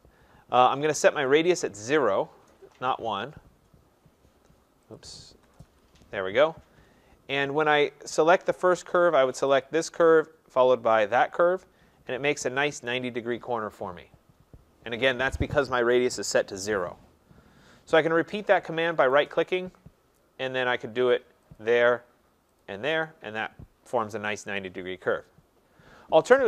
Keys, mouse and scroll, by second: 1.4 click, 2.4 Return, 5.0 click, 5.5 0, 5.7 Return, 9.6 click, 11.2 click, 11.9-12.4 scroll, 19.1 right click, 21.6 click, 22.6 click, 25.3 middle click, 25.3 middle click.